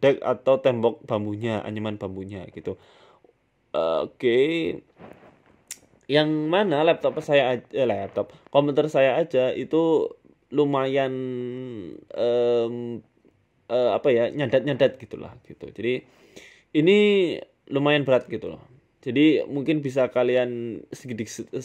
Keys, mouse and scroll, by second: 1.2 click, 1.6 click, 2.5 middle click, 3.9 KP_7, 5.2 click, 6.6 middle click, 7.0-7.4 scroll down 6, 8.1 click, 10.4 click, 10.9 click, 12.0 click, 14.3 KP_1, 15.0 KP_3, 15.4 scroll up 5, 15.6 scroll down 2, 15.8-16.1 scroll up 7, 16.2 shift+middle click, 16.5 scroll down 3, 16.6 scroll up 1, 16.9-17.6 scroll down 2, 18.0 scroll down 1, 18.9 click.